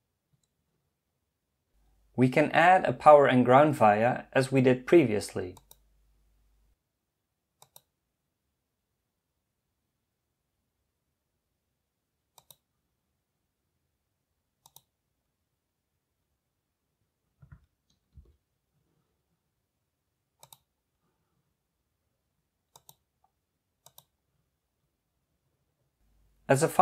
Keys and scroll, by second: 18.2 Escape.